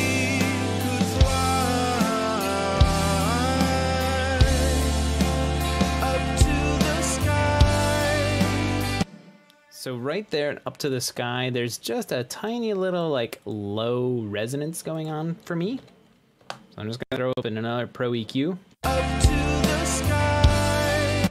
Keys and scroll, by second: 9.9 space, 16.4-17.3 typing, 17.4 Return, 19.7 space.